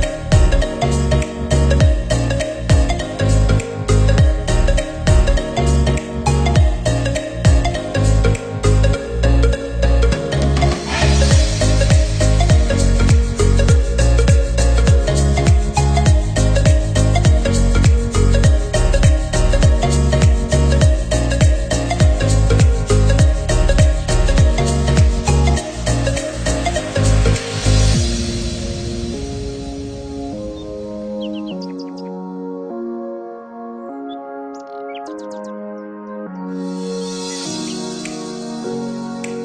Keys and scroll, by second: 21.9 ctrl+-, 31.2 ctrl+=.